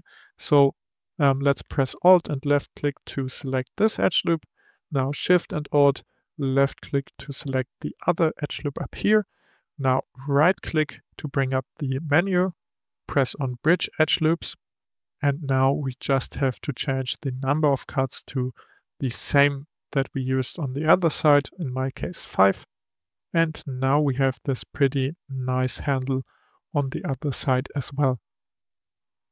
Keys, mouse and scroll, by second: 2.3 alt+click, 7.0 alt+shift+click, 10.4-13.5 right drag, 18.2-20.2 drag, 23.0-23.6 scroll down 3, 23.6-26.7 middle drag.